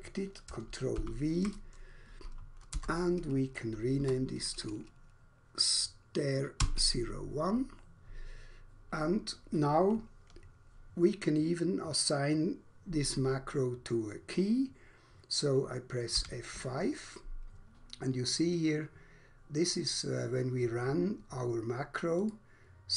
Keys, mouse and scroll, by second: 1.0 ctrl+v, 2.8 BackSpace, 4.0 1, 6.5 Return, 16.0 F5, 22.1 click.